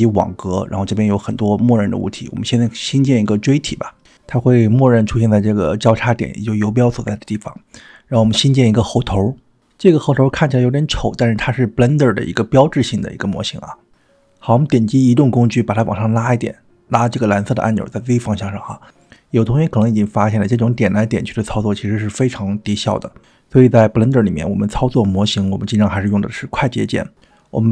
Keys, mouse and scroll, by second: 5.0-6.3 scroll up 4, 6.3-7.1 middle drag, 7.4-7.8 shift+middle drag, 8.1 middle click, 9.1 shift+a, 11.5-13.5 middle drag, 14.1 click, 15.5 click, 17.0-19.3 drag, 22.6 click, 23.2-24.3 middle drag, 24.7-25.8 shift+middle drag, 25.9-26.8 middle drag.